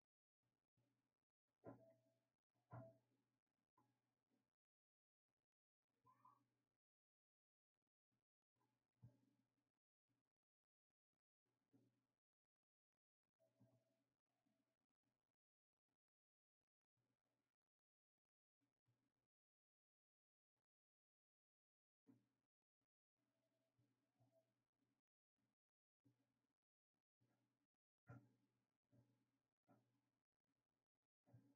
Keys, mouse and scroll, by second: 9.3-17.1 shift+right drag, 17.1-18.1 drag, 18.1-20.4 right drag, 20.4-30.4 drag, 30.4-31.5 right drag.